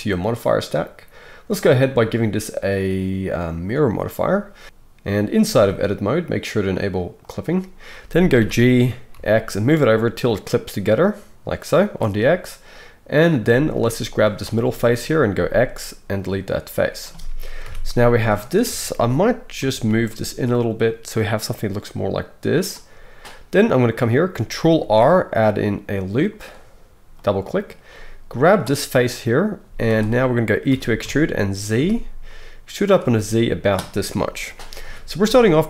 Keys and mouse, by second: 1.6-7.4 drag, 7.4-14.2 middle drag, 8.4 g, 13.4 z, 14.2-22.7 drag, 15.3 x, 17.6 a, 18.6 KP_1, 19.6 g, 22.7-28.0 middle drag, 24.8 ctrl+r, 28.0-33.0 drag, 29.6 z, 30.7 e, 33.0-35.6 middle drag, 34.8 KP_1.